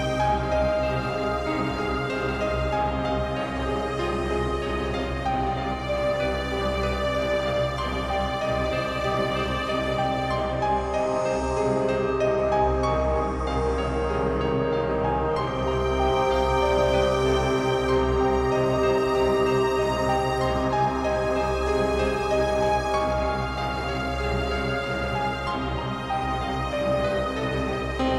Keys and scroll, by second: 0.9 Up, 12.4 ctrl+m, 25.5 space.